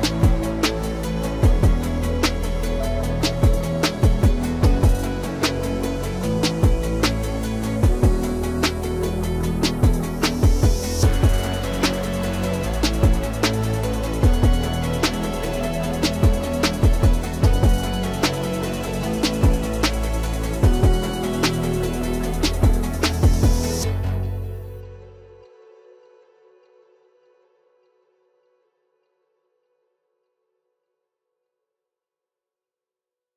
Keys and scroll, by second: 3.6 ctrl+a, 27.5 ctrl+s.